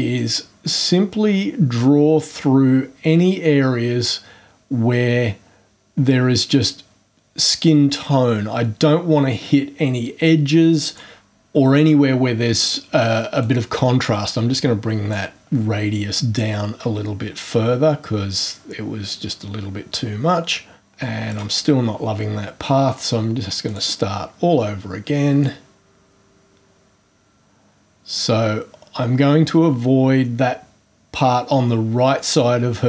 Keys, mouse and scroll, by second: 0.1-11.1 drag, 13.4 click, 21.3 right click, 23.6 click, 25.4-32.8 drag.